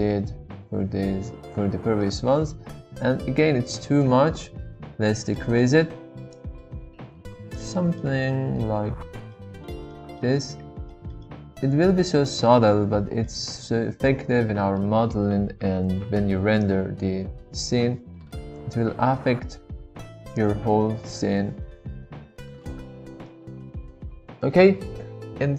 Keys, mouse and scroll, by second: 2.0-2.7 middle drag, 5.5 middle click, 5.5 scroll up 1, 6.7 click, 8.1-8.6 middle drag, 9.5 shift+middle click, 11.2-12.6 middle drag, 13.3-14.8 middle drag, 16.7-20.4 drag, 20.9-22.7 middle drag, 23.3-24.4 middle drag.